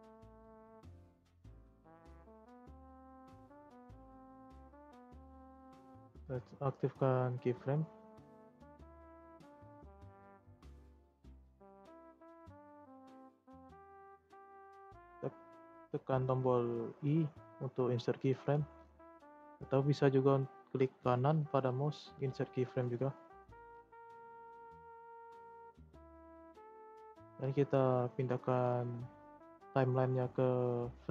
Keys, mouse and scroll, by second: 0.5-0.9 middle drag, 0.9 scroll up 2, 1.3 Tab, 1.7 Tab, 3.2-4.1 middle drag, 4.1-4.6 drag, 4.6-5.6 middle drag, 5.6 scroll up 1, 5.6-6.7 shift+middle drag, 6.7 click, 7.5-10.8 drag, 10.8 scroll down 1, 11.0 middle click, 11.2-12.0 scroll up 2, 12.0-12.5 drag, 12.5-14.0 shift+middle drag, 14.0 i, 24.7-31.1 drag.